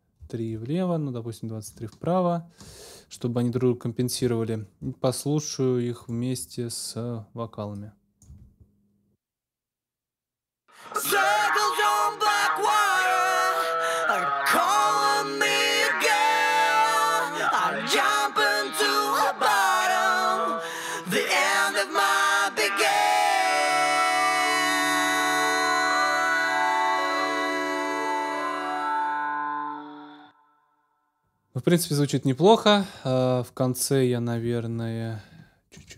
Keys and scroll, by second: 1.7 Up, 8.3 space, 30.0 space, 30.6 super+s.